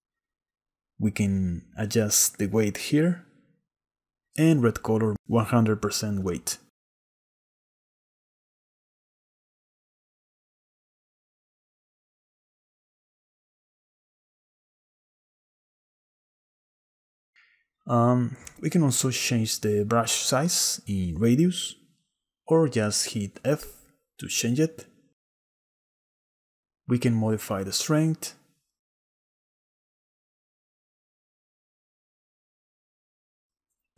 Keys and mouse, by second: 0.9-2.0 drag, 3.3 shift+middle click, 3.7 click, 4.2-5.6 drag, 6.1 click, 6.9 click, 9.1 click, 11.4 middle click, 12.3-13.7 drag, 14.1 click, 14.7-16.3 drag, 16.9 click, 19.0-20.3 drag, 21.8 click, 23.7 f, 28.1-29.7 drag, 29.7 click, 29.8 middle click, 30.4 middle click, 30.6-31.9 drag, 32.1 click, 32.8 click, 33.4 click.